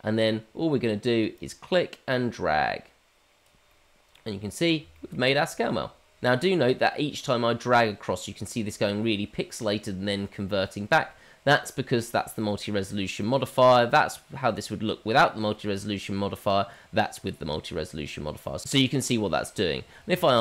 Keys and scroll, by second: 20.2 ctrl+z, 20.2 ctrl+\.